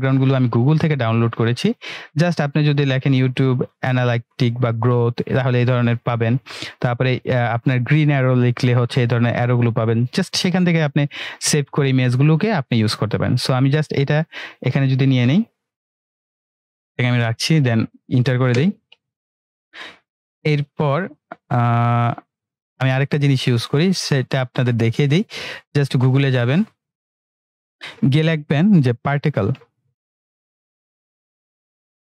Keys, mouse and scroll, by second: 2.9 click, 2.9 typing, 5.9 click, 13.8-15.0 drag, 18.6 Return, 19.7-20.7 drag, 29.3-32.1 typing.